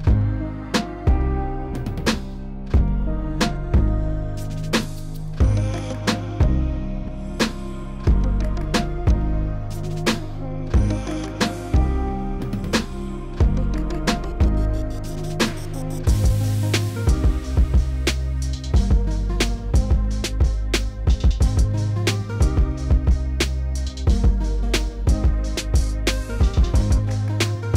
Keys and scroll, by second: 0.6 s, 7.8 w, 12.1 3, 16.2 ctrl+z, 18.3 3, 22.0 s, 27.1 s.